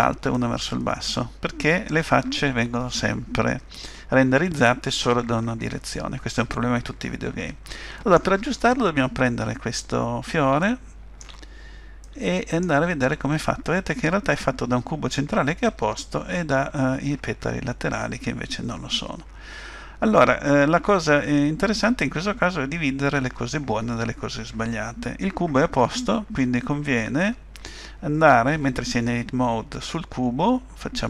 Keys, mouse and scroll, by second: 9.3-9.8 scroll up 2, 10.6 shift+middle click, 11.5 scroll up 1, 12.0 middle click.